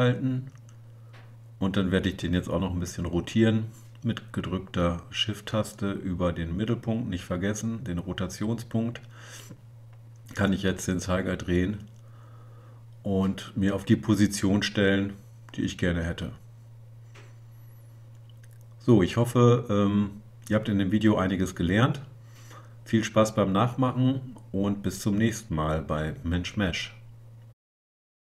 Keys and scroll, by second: 19.5 Tab.